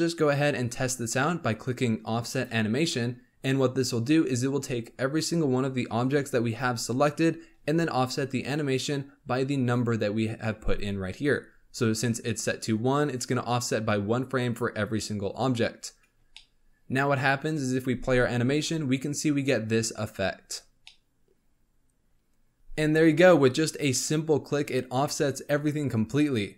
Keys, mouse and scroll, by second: 2.3-7.5 drag, 16.3-17.9 shift+middle drag, 17.9 space, 20.8-22.5 middle drag.